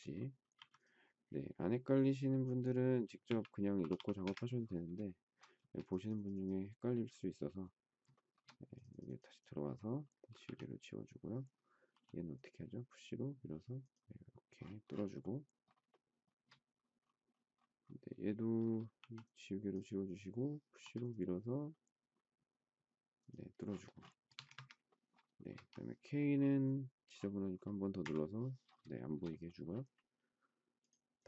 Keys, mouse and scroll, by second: 0.6 m, 2.9-4.4 typing, 5.0 shift+middle click, 5.6 space, 8.1 shift+middle click, 10.4 e, 11.9 p, 15.1 shift+scroll up 1, 15.2 shift+middle click, 15.9 shift+middle click, 18.9 e, 20.8 p, 24.1 space, 24.2 Escape, 24.3 Escape, 25.4 shift+middle click, 28.0 k, 28.9 shift+middle click.